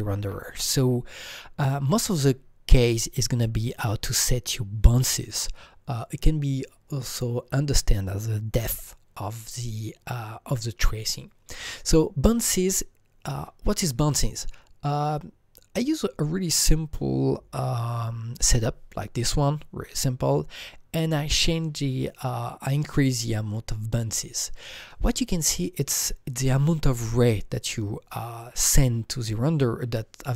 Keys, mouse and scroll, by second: 13.2 Right, 15.0 alt+Tab, 15.0-15.3 scroll down 1, 23.1 Right.